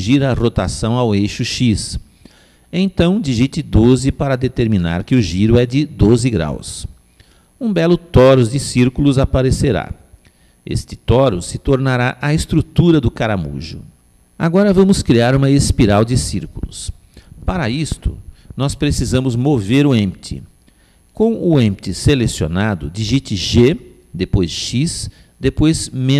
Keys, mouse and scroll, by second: 10.0-14.4 middle drag, 18.6-24.2 middle drag, 24.9 g.